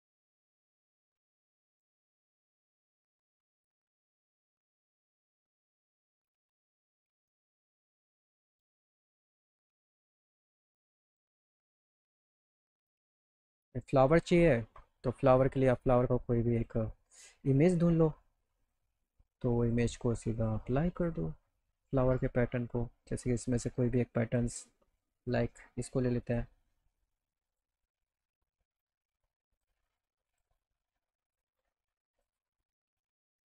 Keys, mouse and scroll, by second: 1.7 click, 5.4 click, 6.0 click, 6.8 ctrl+shift+z, 7.6 ctrl+z, 8.0 click, 8.4 middle click, 11.1 click, 12.1 middle click, 13.8 click, 14.4 alt+middle click, 15.2 middle click, 15.6 scroll up 1, 16.5 click, 17.5 click, 18.6 click, 19.6 click, 20.3 click, 21.0 click, 23.5 scroll down 1, 24.3 click, 25.2 right click, 26.2 click, 27.5 click, 28.7 click, 29.5 click, 30.3 click, 31.2 click, 31.5 click, 32.2 click.